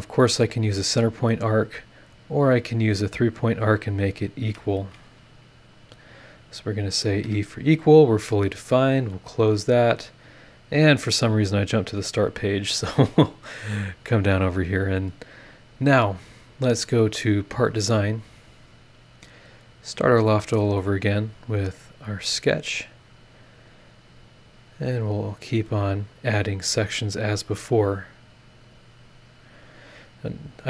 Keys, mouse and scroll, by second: 0.8 click, 1.1-3.3 scroll up 1, 3.3 click, 3.6-3.9 scroll up 1, 3.9 click, 4.3 Escape, 5.6 click, 7.0 click, 7.2 e, 8.7 click, 10.5 click, 11.5 click, 12.2-12.7 scroll down 2, 13.0-13.5 scroll down 4, 14.4 scroll up 2, 16.0 click, 16.7 click, 17.7 click, 19.9 click, 20.5 scroll up 1, 21.5 click, 22.0 click, 22.7 scroll down 1, 23.5 scroll up 1, 24.6 click, 25.7 click, 26.7 click, 27.6 click, 28.7 click, 29.8 click.